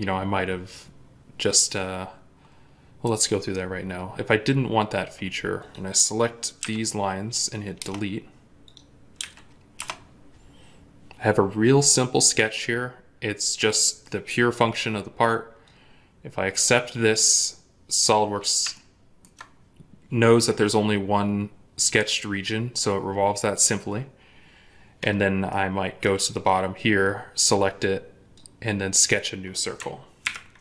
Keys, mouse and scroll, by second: 4.7-6.4 scroll down 1, 6.4 Delete, 7.6 Return, 9.0 Delete, 9.6 Return, 17.1-18.6 scroll up 1, 18.6 ctrl+middle click, 25.3 middle click, 30.1 ctrl+8.